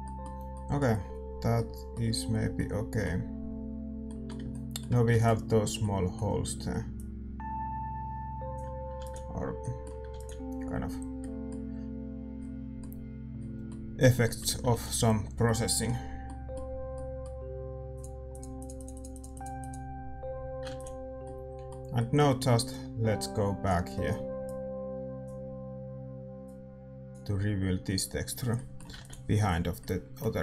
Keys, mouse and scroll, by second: 6.9 ctrl+s, 6.9 middle click, 18.0-24.3 middle drag, 22.9-30.4 drag.